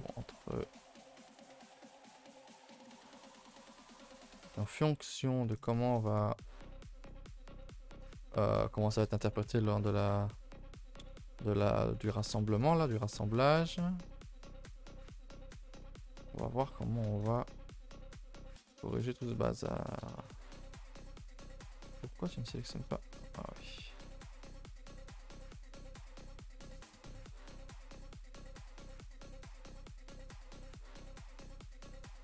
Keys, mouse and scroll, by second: 0.3 alt+shift+click, 0.9 ctrl+z, 1.1 alt+shift+click, 1.9 alt+shift+click, 2.2-3.4 middle drag, 3.4 alt+shift+click, 3.7 middle click, 4.2 alt+shift+click, 4.8 middle click, 5.6 alt+shift+click, 5.9-7.5 middle drag, 7.5 alt+shift+click, 8.1-9.8 middle drag, 9.8 alt+shift+click, 10.4 middle click, 11.0 alt+shift+click, 11.9 scroll up 1, 12.1 ctrl+z, 12.4 shift+middle click, 12.6 scroll up 2, 12.8 middle click, 13.8 shift+click, 14.4 alt+shift+click, 14.7 scroll down 2, 14.9 middle click, 15.3-15.6 scroll down 2, 15.6-17.0 shift+middle drag, 17.0 alt+shift+click, 17.4 middle click, 18.1 ctrl+z, 18.6 alt+shift+click, 19.1 shift+middle click, 19.3-20.1 scroll up 2, 20.1 shift+click, 20.4-20.8 scroll down 1, 20.8 scroll up 1, 21.2 ctrl+z, 21.6 middle click, 22.3-22.7 scroll up 2, 22.7 scroll down 2, 22.9 shift+middle click, 23.2-24.0 scroll up 1, 24.0 shift+click, 24.4 shift+click, 24.9 1, 25.3 1, 25.9 2, 26.2-26.6 scroll down 3, 26.6 shift+middle click, 27.3 ctrl+z, 27.4 ctrl+z, 27.7 ctrl+z, 28.3 middle click, 28.5-29.2 scroll up 4, 29.3 shift+middle click, 29.5-29.9 scroll up 4, 29.9-30.6 scroll down 2, 30.6 shift+middle click, 31.5 shift+click, 31.8-32.2 scroll down 4, 31.9 ctrl+s.